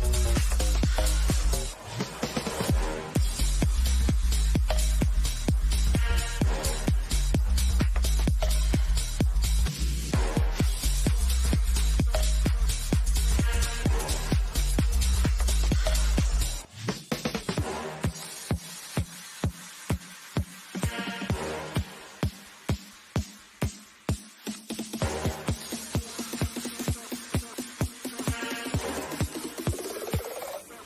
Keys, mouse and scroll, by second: 0.0 shift+middle click, 1.3 scroll up 1, 2.1-9.3 middle drag, 9.3 click, 10.6 scroll up 1, 11.4 middle click, 12.0 scroll up 1, 17.5 click, 17.9 typing, 18.9 scroll up 1, 20.2 middle click, 21.4-21.7 scroll down 1, 22.9 middle click, 23.3 scroll down 1, 24.8 click, 25.2 scroll down 1, 27.7 click.